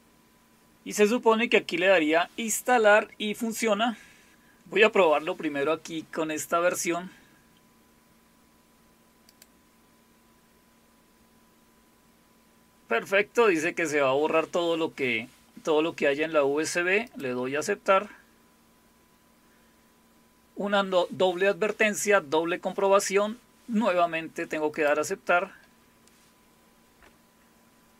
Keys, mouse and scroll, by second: 9.3 click, 17.1 click, 24.7 click.